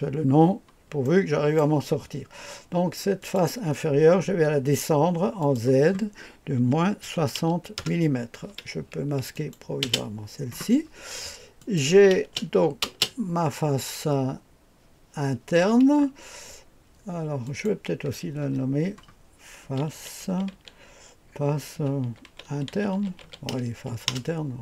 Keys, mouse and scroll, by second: 1.0 click, 3.2 click, 5.4 click, 6.5-7.7 typing, 7.8 Return, 9.3 click, 9.8 space, 11.6 click, 11.9-12.8 typing, 17.4 click, 18.4 F2, 19.4-23.7 typing, 24.1 Return.